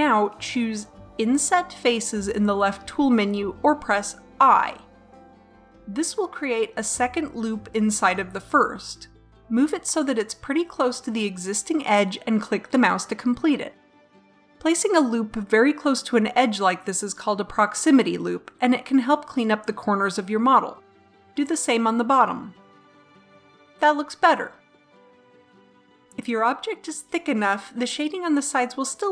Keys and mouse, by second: 4.0 click, 21.1 middle click, 21.6 click, 22.0 i, 23.6 Tab, 24.8 middle click.